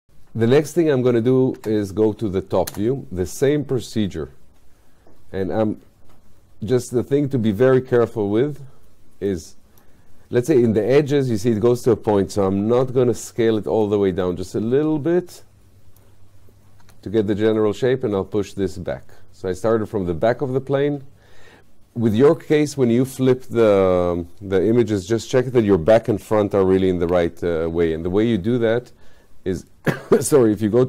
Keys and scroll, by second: 1.7 space, 12.8 r, 16.9 w, 29.8 space.